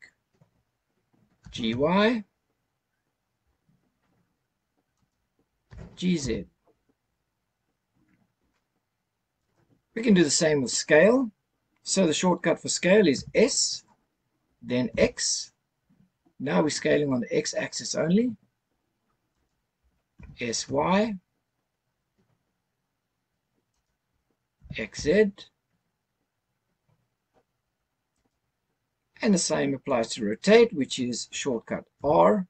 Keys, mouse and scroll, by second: 0.7 ctrl+z, 1.4 g, 1.7 y, 5.0 right click, 5.7 g, 6.2 z, 9.3 right click, 13.1 s, 14.9 x, 19.3 right click, 20.1 s, 20.6 y, 23.7 right click, 24.6 s, 24.9 z, 28.2-31.0 right drag, 32.0 r.